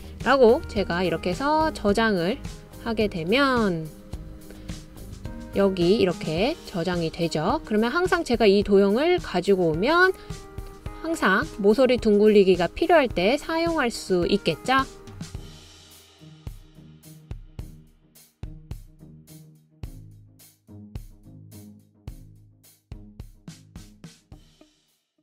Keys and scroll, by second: 0.0-1.0 typing, 3.3-4.0 typing.